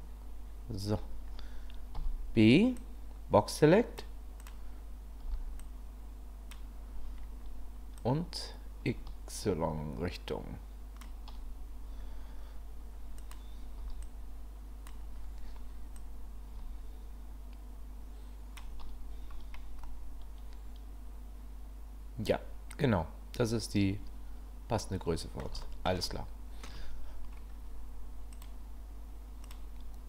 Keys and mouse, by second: 1.9 b, 4.4 click, 5.2 b, 8.0-11.0 drag, 13.8 b, 16.0-18.6 drag, 19.9-21.4 middle drag, 21.4-25.4 drag, 25.4 middle click, 25.6 shift+middle click, 26.1 middle click, 28.3 click, 29.5 click.